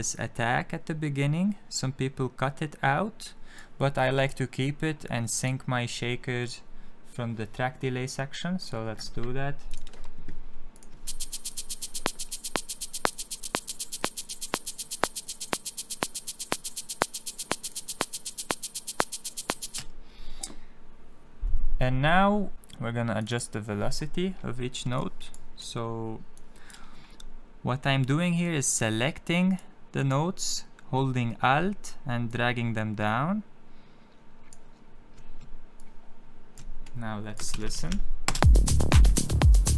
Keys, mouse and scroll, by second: 3.9 click, 5.1 click, 8.5 click, 9.6 click, 10.7 click, 10.9 space, 11.5 click, 13.0 click, 19.6 space, 22.5 click, 23.1 click, 24.9 click, 26.3 click, 28.3 click, 32.2 alt+click, 35.7 alt+click, 36.8 click, 37.4 ctrl+d, 38.2 space.